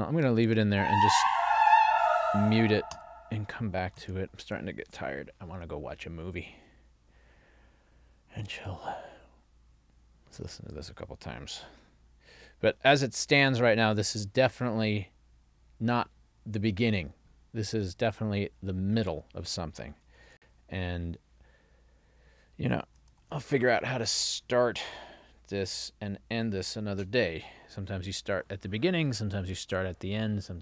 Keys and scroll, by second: 4.1 super+s, 20.3 ctrl+alt+l, 23.2 ctrl+alt+l.